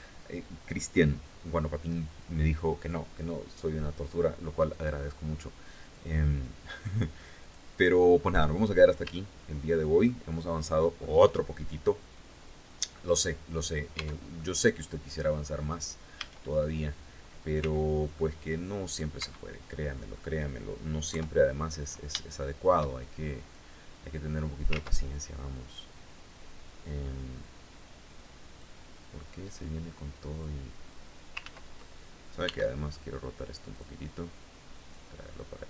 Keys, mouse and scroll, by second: 5.4 click, 6.9 click, 7.5 scroll down 2, 7.9-8.2 scroll up 2, 8.7-9.7 shift+drag, 9.9 shift+click, 13.5 Tab, 13.9-14.9 drag, 15.0-15.4 scroll up 2, 15.7 a, 17.1 c, 17.6-18.7 drag, 18.7 Escape, 19.2 middle click, 20.7 KP_3, 21.2 scroll down 1, 21.7 shift+middle click, 23.1-24.3 drag, 24.3 ctrl+z, 28.1-30.1 drag, 30.9 ctrl+z, 32.0 r, 33.3 click, 34.5-35.6 drag.